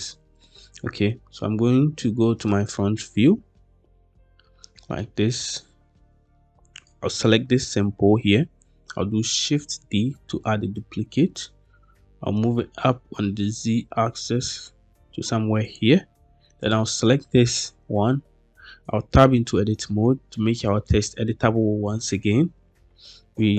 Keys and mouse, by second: 4.9-5.2 shift+middle drag, 5.8-6.2 shift+middle drag, 6.6 click, 9.6 shift+d, 11.8 z, 15.5 click, 16.5-17.0 drag, 18.8 Tab, 23.2-23.5 typing.